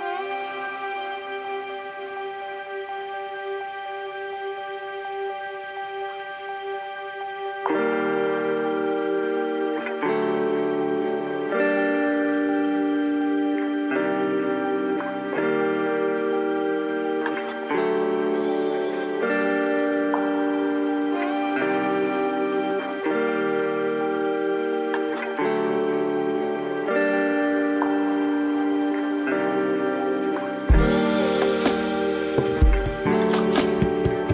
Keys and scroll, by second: 25.4 ], 27.6 ], 30.3 ].